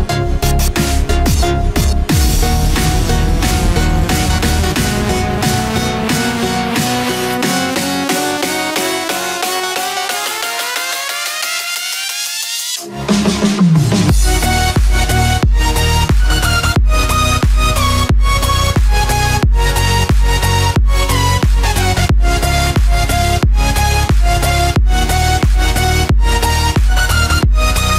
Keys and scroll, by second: 3.6 ctrl+-, 5.8 ctrl+=, 13.4 ctrl+-, 15.1 ctrl+0, 16.4 ctrl+z, 22.8 ctrl+=.